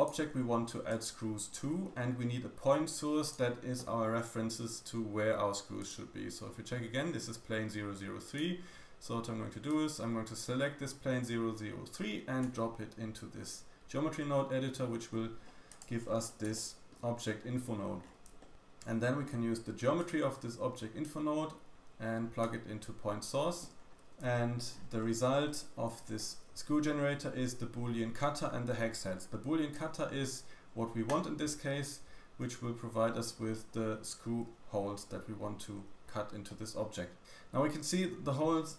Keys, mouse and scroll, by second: 0.1 g, 1.6-2.6 scroll down 2, 2.6-3.1 scroll down 1, 2.6 g, 5.7 click, 5.7 middle click, 5.7 right click, 8.2 click, 8.2 middle click, 8.2 right click, 9.6-13.5 drag, 9.6-13.5 middle drag, 9.6-13.5 right drag, 14.7 g, 15.9-16.5 scroll up 4, 16.4 shift+middle click, 16.9-17.8 scroll up 4, 17.9-18.2 scroll down 2, 18.2-19.2 shift+middle drag, 19.9-21.0 drag, 23.7-24.3 scroll down 5, 24.2 shift+middle click, 24.6-25.2 scroll up 6, 25.2 shift+middle click, 25.8-27.3 shift+scroll up 3, 29.1-29.7 scroll down 2, 29.7 click, 33.3 click, 33.3 middle click, 33.3 right click, 33.3-34.5 scroll down 4, 34.5-35.9 scroll down 2, 35.9-36.4 scroll down 1, 36.4 middle drag, 37.2-38.5 scroll up 1, 38.5-38.7 scroll down 2.